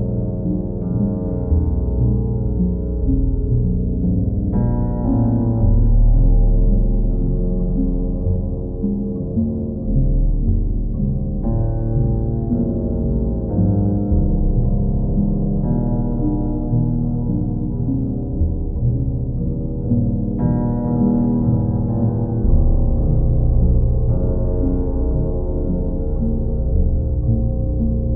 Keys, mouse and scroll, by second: 0.1 click, 1.2 click, 1.6 ctrl+w, 2.5 shift+click, 3.1 alt+click, 4.1 right click, 5.7 click, 7.4 click, 8.8 click, 9.6 click, 9.9 shift+click, 10.6 shift+click, 14.7 click, 15.1 shift+click, 15.7 alt+click, 16.3 click, 18.5 click, 19.0 click, 19.4 click, 20.7 click, 21.5 click, 22.2 click, 22.4 shift+click, 23.4 click, 23.8 alt+click, 24.2 click, 25.2 click, 26.6 alt+click, 27.2 alt+click.